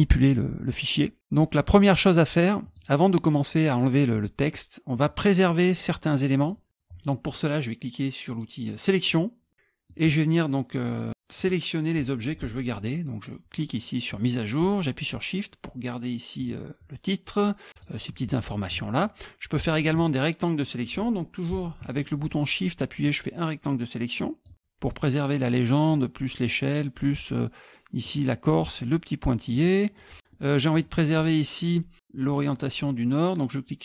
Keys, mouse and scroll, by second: 0.9 middle click, 2.6 click, 4.9 click, 6.4 middle click, 9.5 middle click, 11.4 click, 16.4 shift+click, 17.7 shift+click, 18.5 middle click, 23.0-24.4 shift+drag, 24.5-25.9 shift+drag, 28.0 shift+click, 29.5 shift+click, 30.3 middle click, 30.5 middle click, 30.6 scroll up 1.